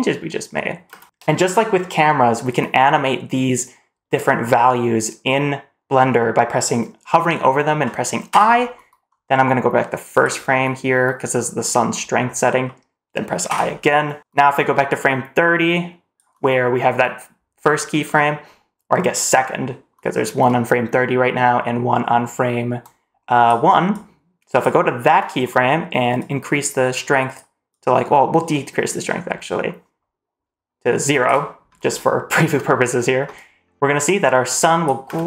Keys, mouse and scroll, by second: 0.8 space, 8.2 i, 10.0 click, 13.4 i, 14.9 click, 22.8 click, 23.9 click, 26.1-27.3 drag, 27.6-31.2 drag, 33.3-34.8 drag, 35.0 space.